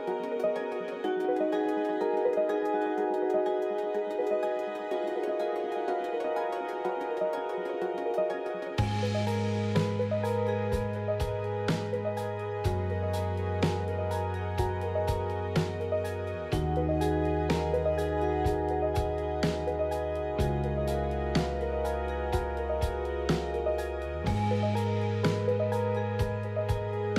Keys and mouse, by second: 1.3 alt+click, 1.9 f, 2.2 middle click, 3.8 f, 5.5 click, 6.2 middle click, 7.0 KP_3, 7.3 Tab, 8.1 Tab, 9.4 ctrl+r, 13.8 ctrl+r, 17.2 Tab, 19.7 middle click, 21.0-22.1 ctrl+z, 23.6 middle click, 24.7 middle click, 25.5 middle click, 26.3 middle click.